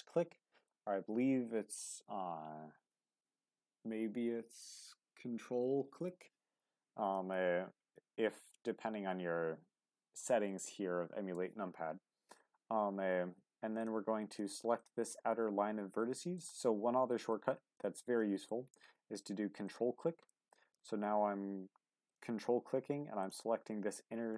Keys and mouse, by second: 16.3 middle click, 17.9 middle click, 19.6 ctrl+click, 20.3 middle click, 22.0 ctrl+click.